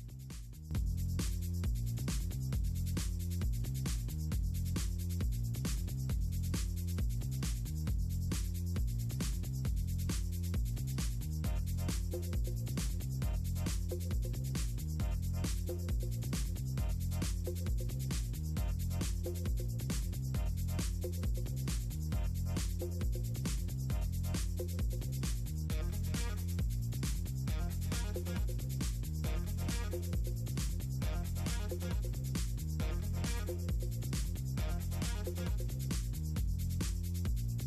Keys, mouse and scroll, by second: 0.6 click, 1.5 click, 3.2 scroll down 2, 3.9-4.9 scroll down 2, 5.2-6.3 scroll down 6, 5.5 click, 7.1 scroll down 2, 7.4 click, 7.6 o, 7.9-8.5 scroll down 2, 8.5-9.6 scroll down 1, 10.3 click, 11.7 click, 12.7 click, 13.1 middle click, 14.9-15.5 scroll down 2, 15.5 d, 15.6 KP_Enter, 16.5-16.8 scroll down 2, 17.7-18.2 scroll down 2, 18.7 middle click, 18.8 Delete, 20.3-20.8 scroll down 4, 21.4 click, 22.2 click, 22.4-23.2 scroll down 2, 23.2 click, 23.2 scroll down 2, 23.5 click, 24.0 scroll down 2, 24.6-25.8 scroll down 2, 24.8-25.8 scroll up 1, 26.2 scroll down 2, 26.5 click, 26.6 v, 26.7 KP_Enter, 27.1-29.1 right drag, 29.3-29.6 scroll down 2, 32.1 scroll down 2, 34.1-35.0 scroll down 4, 35.7-36.0 scroll down 2, 36.0 right click, 36.3-36.7 scroll down 2, 36.9-37.5 scroll down 2.